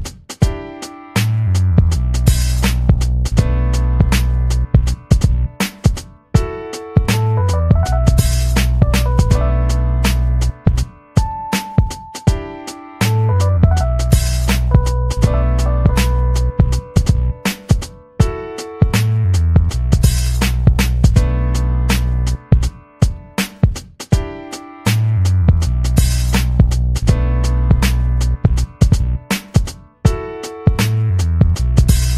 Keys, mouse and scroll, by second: 0.3 click, 0.8 Escape, 1.2 ctrl+scroll down 2, 1.5 ctrl+middle click, 1.9 middle click, 2.4 ctrl+scroll down 2, 2.7 ctrl+middle click, 2.9 click, 3.1 ctrl+scroll down 1, 3.5 click, 3.9-4.3 ctrl+scroll up 1, 4.6 click, 5.5 ctrl+v, 6.6 click, 7.0 ctrl+scroll up 2, 7.8-13.0 typing, 14.5 click, 14.9 click, 15.7 click, 16.2-17.7 drag, 17.8 click, 18.4 click, 18.8 ctrl+scroll down 2, 19.5 click, 19.9 middle click, 20.9 ctrl+scroll up 2, 21.1 ctrl+middle click, 21.5 middle click, 21.9 ctrl+scroll down 2, 22.2 middle click, 22.7 ctrl+scroll down 2, 23.0 ctrl+middle click, 23.7 ctrl+scroll down 2, 26.9 click, 27.6 click, 28.1 ctrl+c, 30.3 click, 31.3-31.6 scroll up 2.